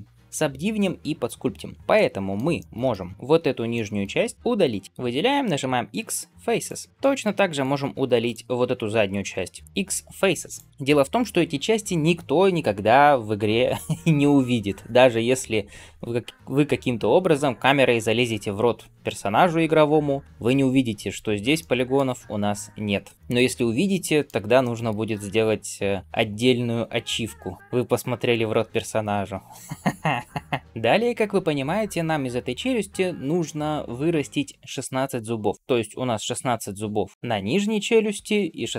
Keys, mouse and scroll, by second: 1.8 middle click, 2.4 shift+middle click, 2.7 middle click, 3.2 alt+z, 3.6 middle click, 5.4 x, 6.9 shift+middle click, 7.4-9.6 drag, 9.6 x, 10.7 shift+middle click, 10.7 scroll down 1, 21.1-21.4 scroll up 1, 21.4-24.2 middle drag, 24.5 shift+middle click.